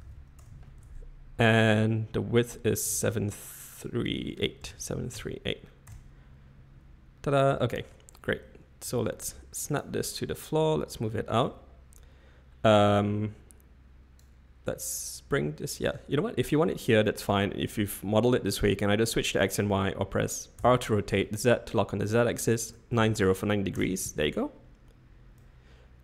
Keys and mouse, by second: 3.0 drag, 3.7-6.6 drag, 7.5 shift+middle click, 8.8 g, 11.4-12.5 drag, 12.7-14.2 drag, 20.6 r, 25.3-26.0 drag.